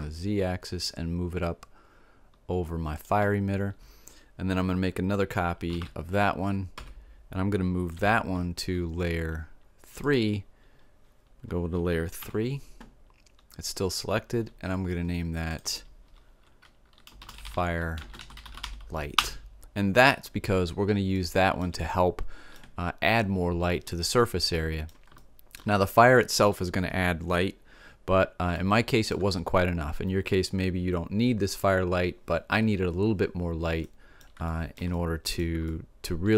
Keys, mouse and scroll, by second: 3.0-4.9 drag, 5.7 shift+d, 7.9 m, 12.1 3, 15.4-17.4 drag, 21.2-27.7 middle drag, 28.5-30.4 middle drag, 33.8-36.3 middle drag.